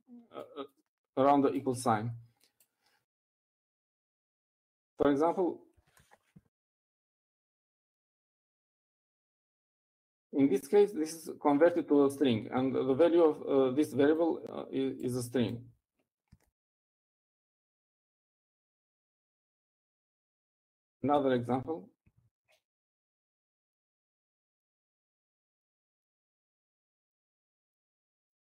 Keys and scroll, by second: 6.8-10.1 typing, 11.8-12.6 typing, 21.1-23.4 typing, 23.6 shift+Left, 26.3-28.5 typing.